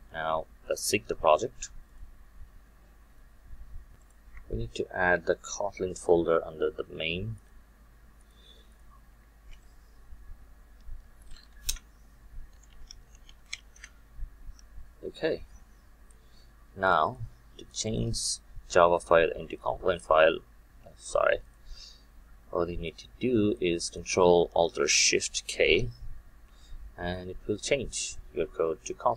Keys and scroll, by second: 5.1 alt+1, 9.6 alt+Insert, 27.3 ctrl+alt+shift+k.